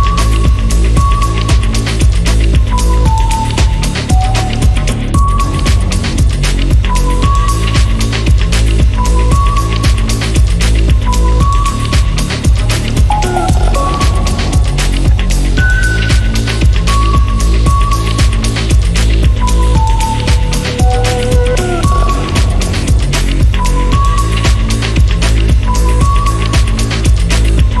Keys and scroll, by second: 0.4 Escape, 20.0 Escape, 24.3-27.8 typing, 27.6 Return.